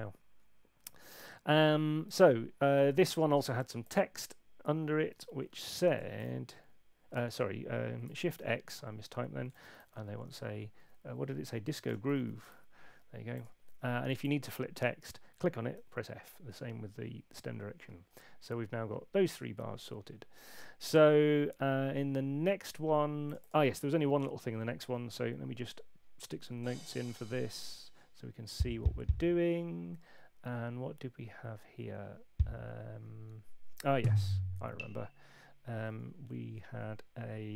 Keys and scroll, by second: 5.2 super+8, 6.1 shift+d, 7.1 Escape, 8.3-10.2 typing, 11.5-12.9 typing, 15.7 f, 26.4 6, 32.9 Left.